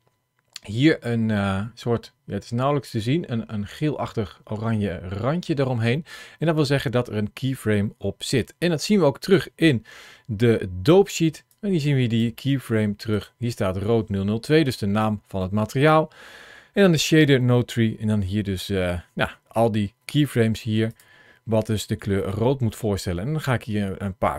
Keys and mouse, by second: 9.0 click, 11.4 click, 13.0 click, 22.2-24.3 drag.